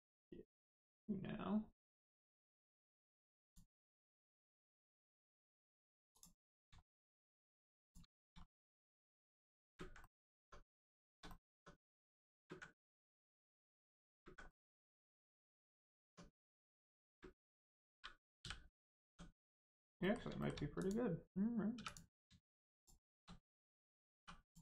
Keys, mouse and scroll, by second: 2.3 middle click, 2.7 right click, 3.4 click, 3.8 middle click, 6.1 click, 6.3 middle click, 6.7 shift+middle click, 7.1 scroll up 1, 7.3 middle click, 7.8 click, 8.1 shift+middle click, 8.3 scroll down 1, 8.5 middle click, 9.6 ctrl+space, 9.9 middle click, 10.3 Tab, 10.9 shift+middle click, 11.2 middle click, 11.3 middle click, 11.5 Tab, 12.3 ctrl+space, 13.3 click, 13.3 click, 14.0 ctrl+space, 14.4 middle click, 14.5 middle click, 14.7 Tab, 15.3 middle click, 16.0 Tab, 16.3 click, 17.0 ctrl+space, 18.3 space, 18.6 middle click, 19.0 Tab, 19.4 middle click, 19.7 scroll down 1, 19.9 middle click, 20.3 shift+middle click, 20.7 click, 21.7 3, 21.8 click, 22.7 shift+click, 24.1 click, 24.4 click.